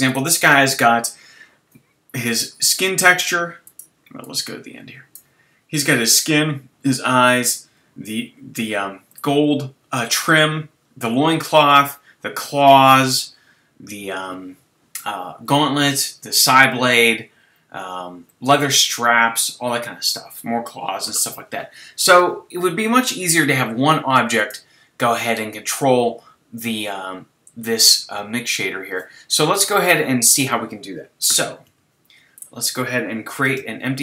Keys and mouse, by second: 31.3 z, 31.6 z, 32.5 click, 33.5 shift+a.